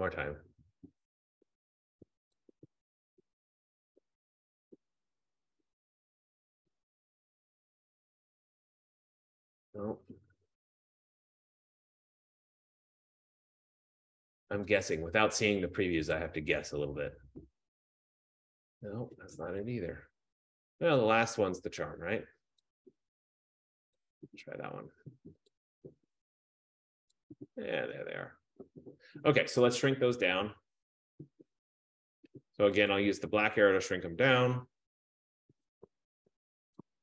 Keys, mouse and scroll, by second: 0.4 click, 2.5 click, 6.4 click, 8.0 click, 10.1 Escape, 11.7 click, 13.5 click, 14.9 click, 16.3 click, 19.6 Escape, 20.8 click, 22.8 click, 24.1 click, 25.7 click, 33.0 click, 36.1 Caps_Lock.